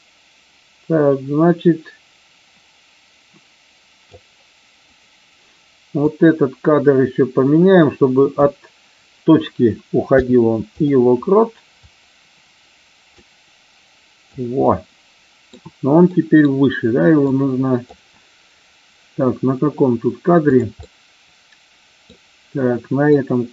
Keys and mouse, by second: 6.0-8.3 drag, 11.7-14.3 drag, 14.6-15.5 middle drag, 16.1 middle drag, 17.2-18.0 drag, 20.5 click, 20.7-22.0 middle drag, 23.1-23.5 drag.